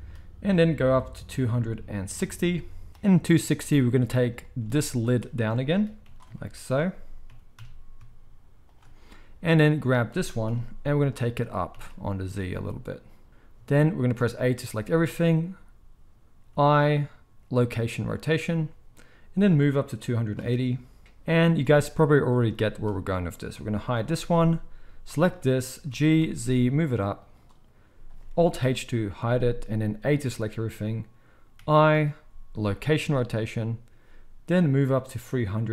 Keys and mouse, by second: 0.5-5.1 drag, 5.1-7.3 middle drag, 6.0 g, 6.1 z, 7.3 g, 9.7 click, 10.5 KP_1, 11.4 g, 11.8-19.4 middle drag, 14.6 a, 16.5 i, 19.4-22.2 drag, 22.2-23.3 middle drag, 22.4 z, 23.3 click, 23.4-24.4 middle drag, 23.9 h, 24.4-27.3 drag, 25.9 g, 27.3-34.5 middle drag, 28.6 alt+h, 30.1 a, 31.6 i, 34.5-35.7 drag.